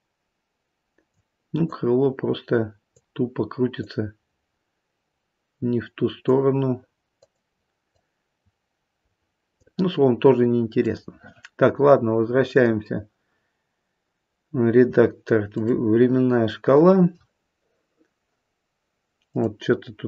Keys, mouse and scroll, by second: 1.6 click, 3.7 click, 7.1 click, 7.8 click, 10.8 click, 12.5 click, 19.2 click.